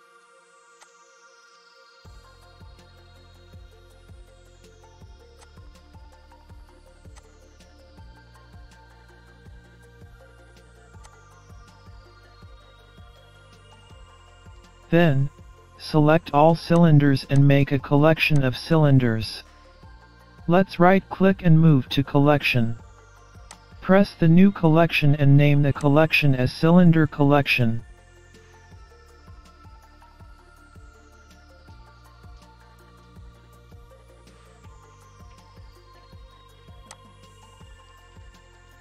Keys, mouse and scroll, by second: 0.2 scroll up 1, 1.3 click, 2.6 shift+d, 4.1 click, 5.9 middle click, 7.1 shift+d, 8.7 click, 10.4 click, 11.4 middle click, 12.0-12.8 scroll down 4, 12.8 scroll up 3, 13.2 shift+d, 14.3 click, 15.7 middle click, 16.6-17.2 scroll down 4, 16.8-17.2 scroll up 3, 17.2-17.5 scroll down 1, 17.7 middle click, 20.1 shift+click, 20.7 shift+click, 21.7 shift+click, 23.9 right click, 36.2 l.